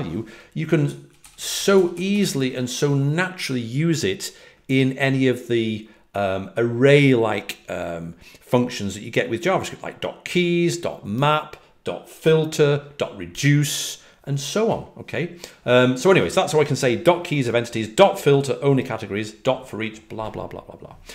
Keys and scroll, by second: 19.4-20.2 typing.